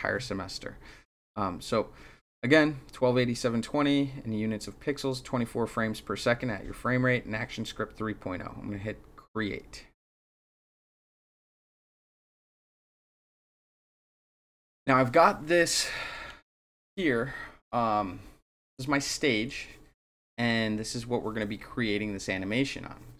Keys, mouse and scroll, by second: 10.4 click.